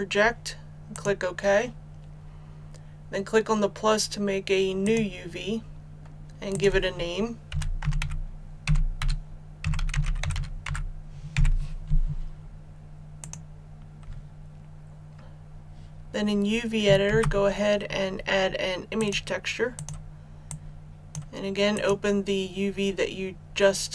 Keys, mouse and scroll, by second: 7.5 click, 8.0-11.3 typing, 13.2 click, 15.2 shift+a, 17.0 shift+a, 18.9-23.9 drag.